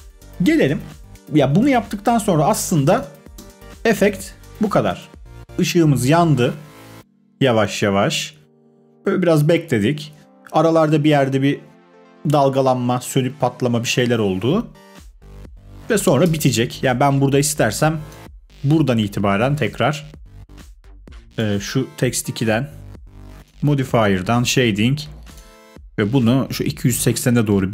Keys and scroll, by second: 3.3 space, 16.2 space.